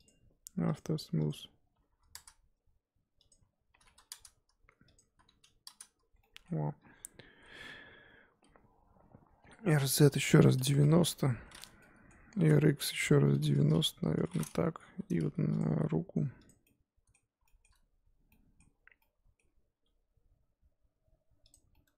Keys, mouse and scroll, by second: 0.7-6.2 drag, 6.2 middle click, 6.9 KP_1, 8.8-9.6 scroll down 1, 9.6 r, 11.8 middle click, 12.3 r, 13.9 KP_1, 14.9 g, 15.7 r, 16.6-18.6 middle drag, 18.6-19.0 scroll up 1, 19.0 middle click, 19.7 s, 21.7 middle click.